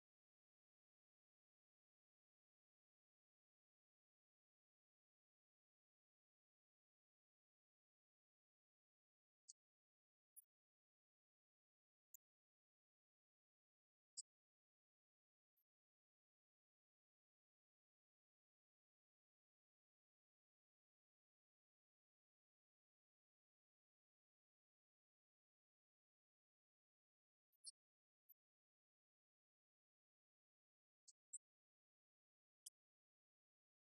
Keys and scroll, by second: 0.6-2.5 typing, 6.1 s, 7.9 BackSpace, 11.7 Return, 12.0 Up, 12.2 Right, 13.2 Left, 14.4 Right, 15.7 Right, 16.2 Left, 17.0 Right, 19.7 Left, 21.1 Right, 22.6 Left, 24.6 Right, 26.4 Right, 28.4 Left, 29.9 shift+Right, 31.1 Right, 32.5 Left, 32.8 Right.